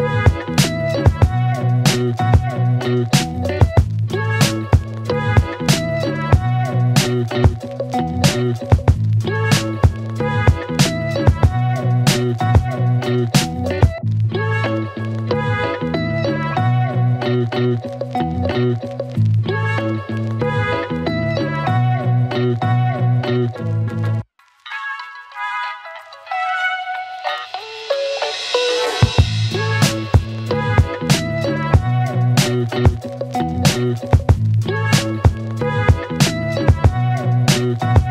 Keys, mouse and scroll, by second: 0.3-0.9 click, 1.0 space, 4.3 space, 5.4-8.0 click, 8.2 space, 11.8 space, 14.2 click, 16.5 ctrl+c, 20.1 click, 24.2 ctrl+v, 25.5 space, 25.8 click, 26.1-26.9 space, 27.5-29.4 click, 30.6 space, 32.2 space, 33.3 click, 34.8 Return, 36.4 click, 37.6 Return.